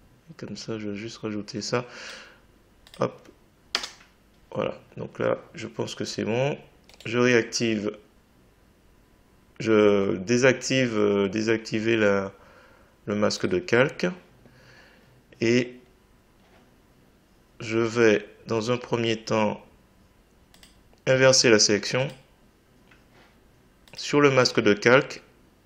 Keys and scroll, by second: 3.7 Return.